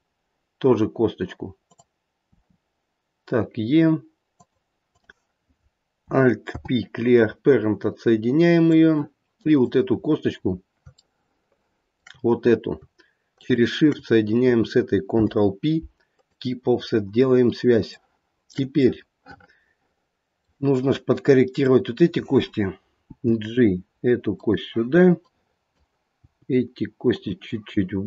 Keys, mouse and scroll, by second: 1.6 click, 2.2 e, 4.8 click, 6.4 alt+p, 9.5 click, 10.4 scroll up 3, 11.3 shift+middle click, 13.3 shift+click, 15.1 ctrl+p, 17.0-17.7 scroll down 3, 17.9 shift+middle click, 18.9 middle click, 20.3 middle click, 21.6 click, 23.0 g, 25.2 click.